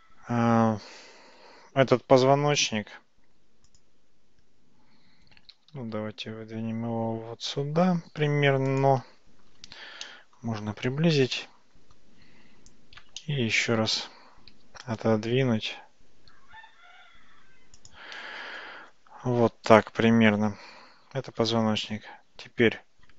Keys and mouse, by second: 2.1 Tab, 2.6 Tab, 5.6 g, 10.1-10.5 shift+middle drag, 11.4-12.1 shift+middle drag, 13.3-13.7 shift+middle drag, 14.5 g, 21.9-22.5 middle drag.